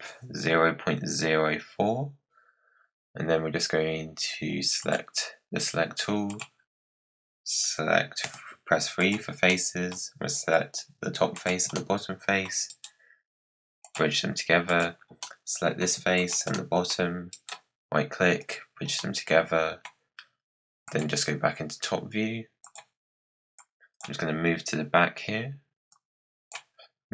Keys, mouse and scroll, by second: 4.7-6.3 drag, 8.1 3, 8.9 click, 9.4-11.3 middle drag, 11.3 shift+click, 11.6 middle click, 12.6-14.6 right drag, 14.6 click, 15.1 middle click, 16.1 shift+click, 16.4 middle click, 17.2 right click, 18.9-20.8 middle drag, 20.8 click, 22.5 click, 23.5 click, 24.2-24.6 scroll up 6, 25.8-27.1 drag.